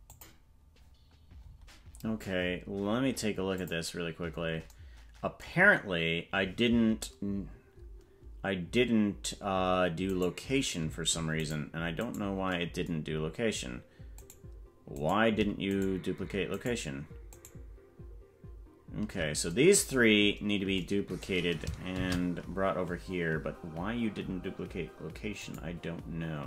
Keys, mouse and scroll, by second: 1.4-1.7 scroll up 3, 2.0-3.5 scroll down 4, 3.5 click, 10.1 right click, 11.4 right click, 12.0 right click, 14.1 right click, 15.0 right click, 15.7 shift+right click, 17.3 shift+right click, 20.2-20.7 scroll down 5, 22.0 shift+d.